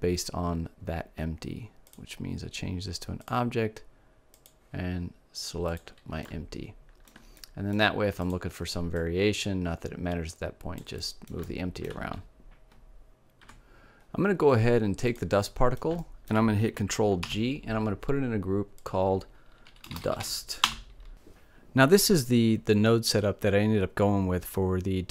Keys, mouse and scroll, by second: 1.3-3.2 drag, 3.8-5.9 drag, 5.7 right click, 7.7-10.1 drag, 10.1 right click, 14.3 right click, 14.7-16.3 drag, 16.5 ctrl+g, 18.1-20.0 drag.